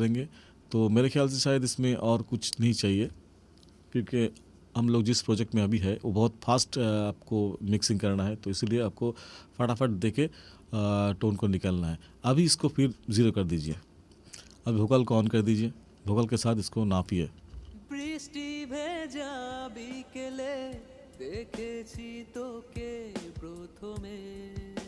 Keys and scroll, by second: 17.5 space.